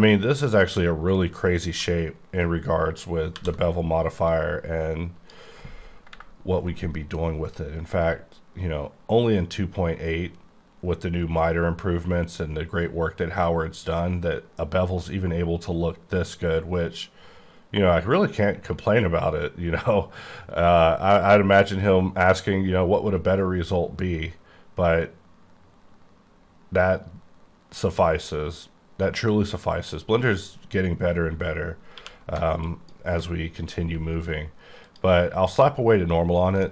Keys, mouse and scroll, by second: 1.8 alt+Num_Lock, 3.4 alt+v, 4.2 click, 31.9 q, 32.6 alt+click, 34.8 click, 36.3 scroll down 3, 36.6 middle click.